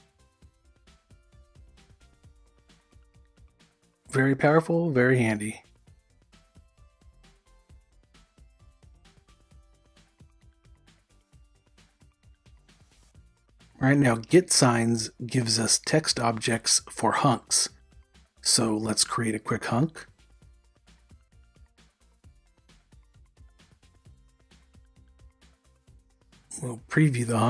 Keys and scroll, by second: 2.2 u, 6.5-9.0 typing, 10.3 u.